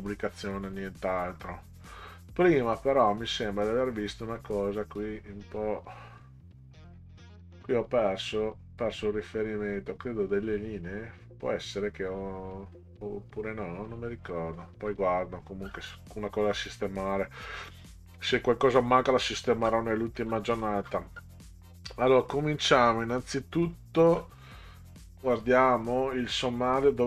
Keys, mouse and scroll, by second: 0.6-5.8 scroll up 24, 8.2-9.1 scroll up 6, 9.3 middle click, 10.2 scroll up 2, 12.0 scroll up 2, 12.9 scroll up 2, 14.8-15.7 scroll down 6, 16.4 scroll down 2, 18.2-21.2 scroll down 20, 23.7-26.4 scroll up 14.